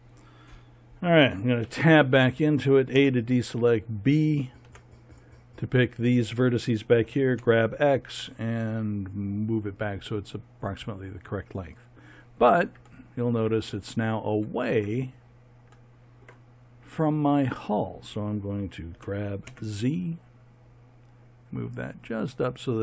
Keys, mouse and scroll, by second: 1.6 Tab, 2.9 a, 4.6 b, 6.8 g, 18.9 g.